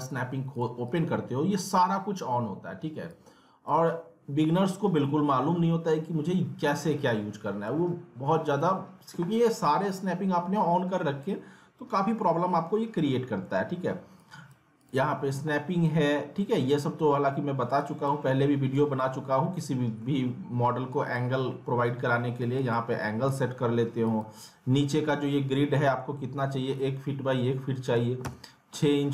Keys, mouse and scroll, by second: 14.2 click, 17.8 click, 19.5-20.9 alt+middle drag, 20.9 click.